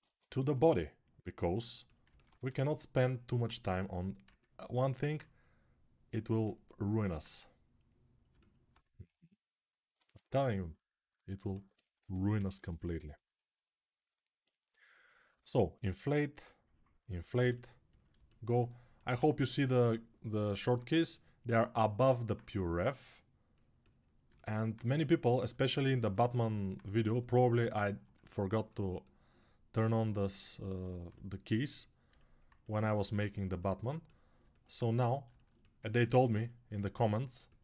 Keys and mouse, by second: 0.1 shift+a, 2.1 Tab, 4.1 s, 6.0-7.2 alt+middle drag, 7.2-9.8 right drag, 9.7 ctrl+Tab, 11.8-12.6 typing, 15.1 6, 17.1 g, 18.1-20.5 ctrl+alt+right drag, 20.5-31.9 ctrl+alt+drag, 31.9-35.2 alt+right drag.